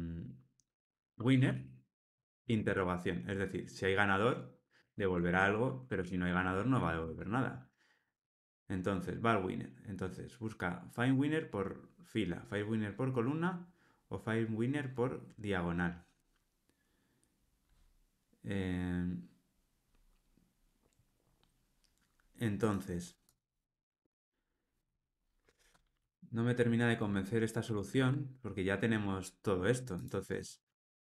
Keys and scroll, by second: 2.4 Return.